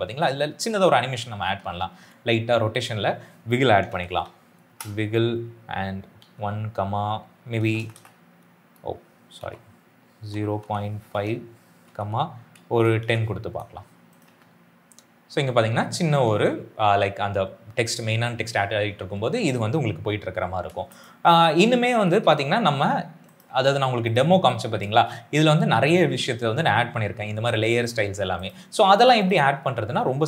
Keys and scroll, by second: 1.3 r, 3.3-4.5 typing, 4.5 Return, 5.9 1, 6.2 ,, 7.5 BackSpace, 7.7 BackSpace, 7.8 BackSpace, 9.3-14.1 typing, 20.6 space, 21.3 s, 24.8 space.